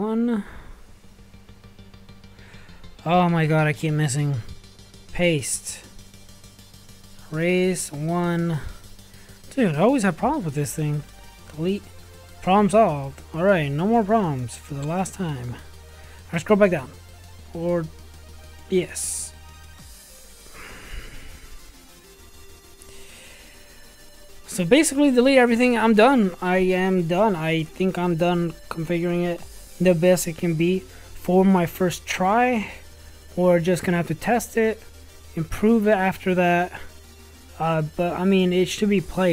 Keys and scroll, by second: 6.9 BackSpace, 8.1 1, 10.5 Delete.